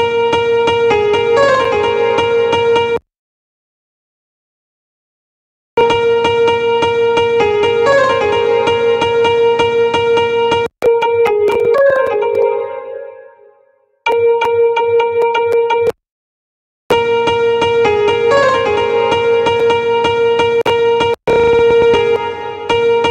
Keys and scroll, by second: 21.9 space.